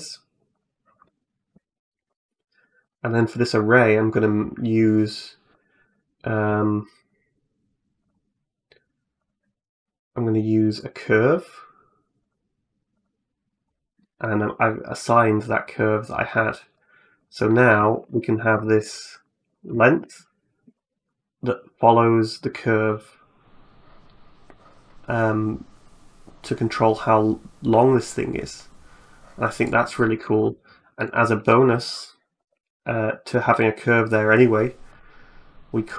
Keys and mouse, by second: 0.4 right click, 2.7 click, 3.1 click, 5.3 click, 5.7 click, 6.4 click, 6.8 click, 7.8 click, 9.0 click, 9.6-10.6 drag, 12.1 click, 13.8 middle click, 16.6 right click, 17.0 right click, 17.5 middle click, 17.8 Tab, 18.1 middle click, 18.4 shift+middle click, 19.3 right click, 19.6 shift+middle click, 20.5 g, 30.2 Tab, 30.8 click.